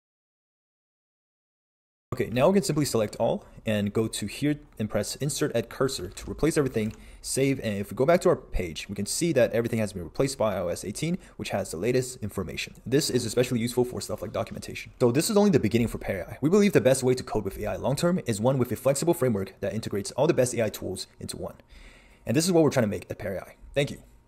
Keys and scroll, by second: 2.3 super+a, 6.0 super+s, 7.0 super+Tab.